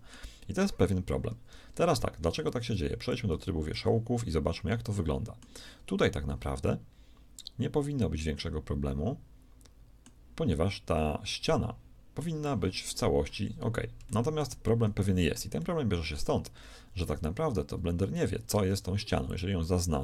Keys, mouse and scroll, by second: 1.2 ctrl+z, 2.5 ctrl+Tab, 3.3 z, 18.4 ctrl+Tab.